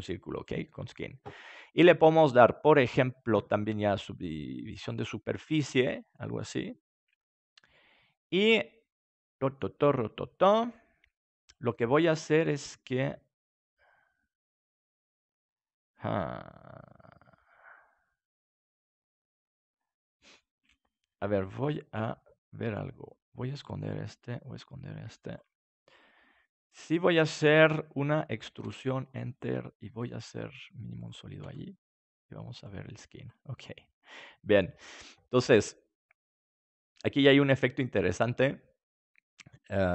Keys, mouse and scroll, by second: 5.6-7.4 middle drag, 18.2-20.4 middle drag, 22.0 Tab, 23.7-28.3 drag, 28.3 e, 29.8 s, 30.5 click, 31.0-34.5 drag, 31.3 Tab, 33.5-34.5 middle drag, 34.9 middle click, 37.7-39.8 middle drag.